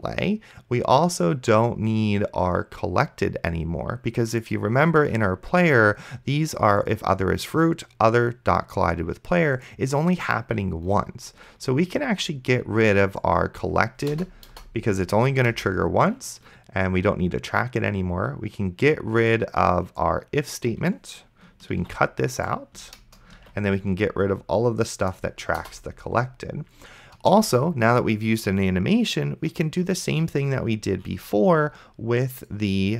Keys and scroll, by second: 14.4 BackSpace, 15.5 Return, 22.0 ctrl+x, 23.0 Return, 23.7 ctrl+v, 25.6 BackSpace, 27.4 Return.